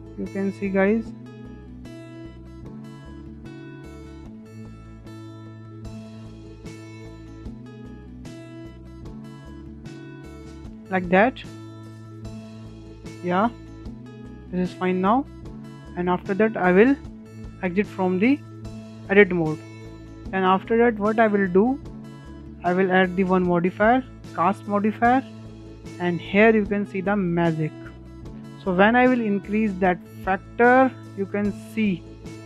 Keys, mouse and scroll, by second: 0.0-0.7 scroll up 6, 0.7-1.1 scroll down 6, 1.1-2.6 shift+middle drag, 2.6 scroll down 4, 2.9 shift+middle click, 3.6-4.7 scroll up 4, 4.7 click, 6.6 shift+middle click, 7.5-10.5 drag, 13.2 click, 13.6-14.4 scroll down 6, 13.9 shift+middle drag, 14.4-14.8 shift+middle drag, 14.8 click, 15.8 Tab, 17.0-17.5 shift+middle drag, 17.5 scroll up 2, 17.8-21.1 shift+middle drag, 21.1 click, 21.9-24.7 drag, 24.7-28.9 shift+middle drag, 28.9-31.8 drag, 31.8-32.4 middle drag.